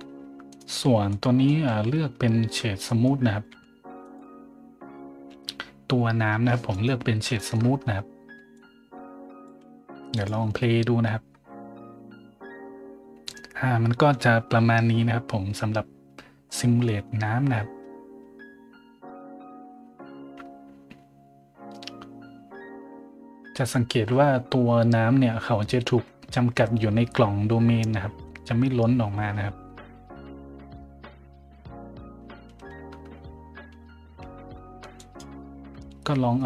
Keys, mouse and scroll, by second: 0.5 right click, 1.1-1.4 middle drag, 1.7 z, 2.1 middle click, 2.5 middle click, 2.6 middle click, 2.8 middle drag, 3.2 middle click, 3.5 w, 4.0 click, 5.0 scroll down 1, 5.3 a, 6.7 right click, 7.4 shift+middle drag, 7.7 scroll down 1, 8.5-9.4 drag, 10.1 click, 11.3 middle drag, 35.0 click.